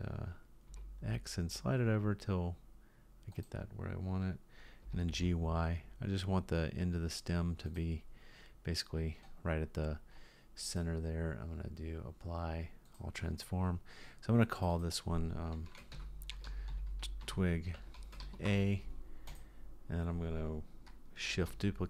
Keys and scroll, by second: 4.8 g, 21.4 shift+d.